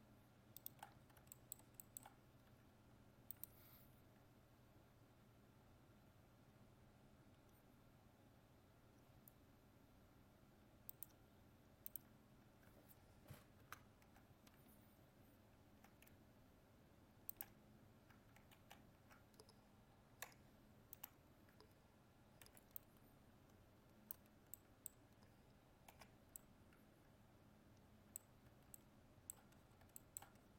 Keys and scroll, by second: 13.6 ctrl++, 18.5 ctrl+z.